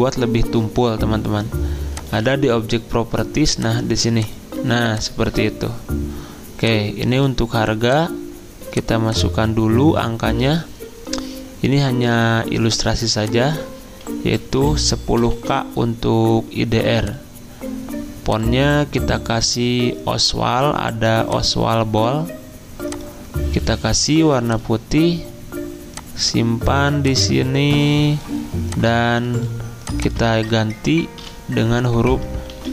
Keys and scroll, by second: 14.1-15.1 typing, 15.4 ctrl+a, 30.4 ctrl+a, 31.2 k, 32.6 ctrl+a.